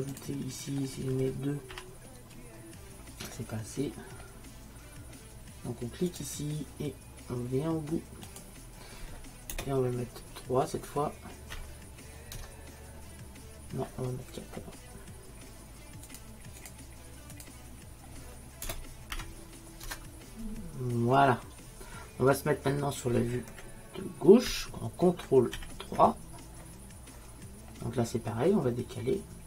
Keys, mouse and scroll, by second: 6.2-8.1 drag, 16.1-18.1 drag, 25.6 ctrl+n.